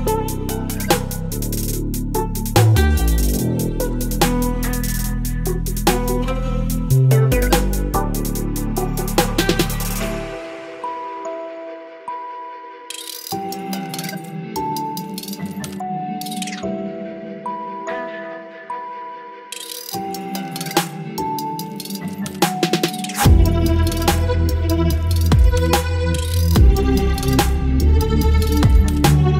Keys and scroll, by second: 3.8 space, 5.7 ctrl+BackSpace, 6.0 space, 9.4 ctrl+BackSpace, 12.4 ctrl+BackSpace, 14.5 Delete, 19.9 Delete, 21.4 space, 23.0 Delete, 23.3 space, 24.8 space, 28.3 space, 29.1 Delete.